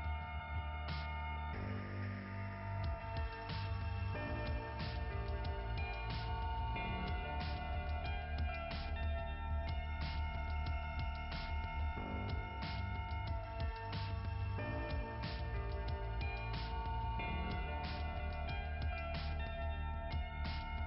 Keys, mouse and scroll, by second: 0.6 click, 1.9 click, 4.9 click, 7.9 click, 8.9 click, 9.7 click, 10.6 click, 11.9 click, 12.2 click, 14.5 click, 14.8 click, 15.1 click, 15.3 click, 15.6 click, 18.2 click, 19.3 click, 19.4 click, 20.6 click.